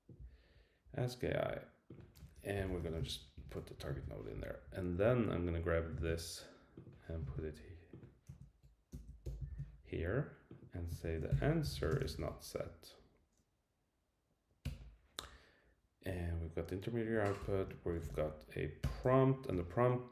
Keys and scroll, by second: 3.3 Return, 3.8 Right, 3.9 super+v, 6.0 super+c, 7.3 super+v, 8.3 Right, 8.9 Left, 9.5 super+v, 11.0 shift+super+Left, 14.6 Return, 17.4 Return, 18.8 Return, 19.1 Right.